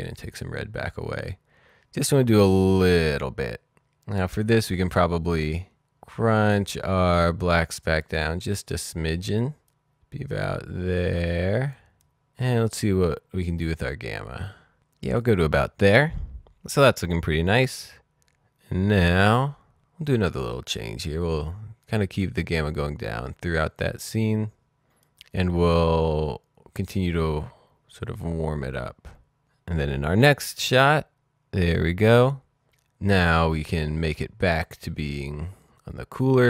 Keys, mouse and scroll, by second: 0.3-1.9 scroll down 1, 1.9-2.9 scroll up 1, 6.8 click, 7.8 click, 12.4 click, 15.9 click, 21.8 click, 26.8-27.7 scroll down 1, 30.3 click, 34.5 click, 34.5-35.6 scroll down 1, 35.6-36.4 scroll up 1.